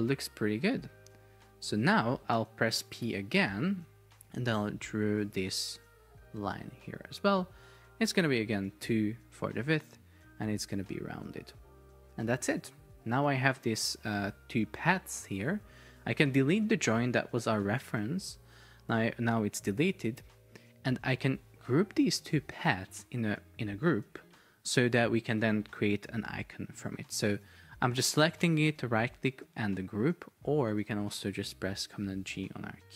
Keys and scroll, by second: 1.3 Escape, 7.2 Escape, 8.6 Return, 16.7 Delete, 30.8 Escape, 32.1 super+g.